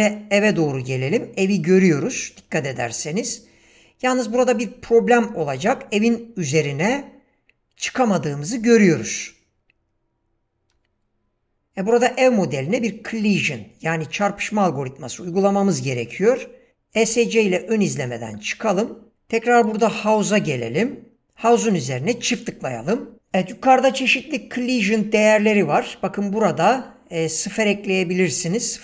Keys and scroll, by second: 5.4 space, 17.0 Escape, 19.1 ctrl+space.